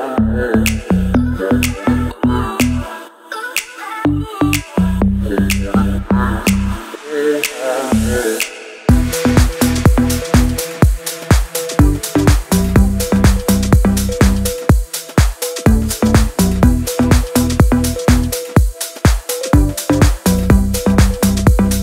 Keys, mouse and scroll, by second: 1.1 scroll up 1, 1.9 click, 3.5 ctrl+alt+shift+e, 4.4 ctrl+shift+a.